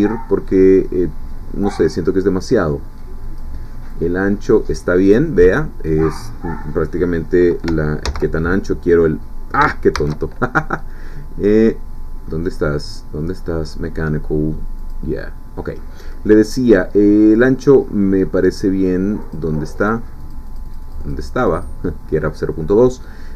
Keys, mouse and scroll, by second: 3.9-5.3 drag, 8.1 ctrl+z, 9.9 shift+a, 14.8 click, 19.2 click, 20.2-22.3 drag.